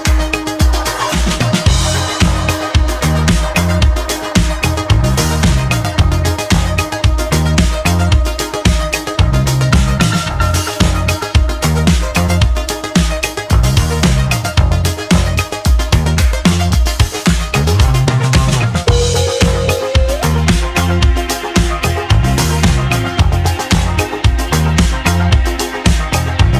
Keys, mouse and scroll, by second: 4.1-4.5 middle drag, 4.5-6.1 scroll down 2, 6.1-7.2 scroll down 1, 9.3-12.3 drag, 12.3 ctrl+p, 13.9-15.3 drag, 15.3 g, 17.2 click, 17.5-17.9 scroll down 2, 17.9-20.9 shift+middle drag, 21.9-25.2 drag.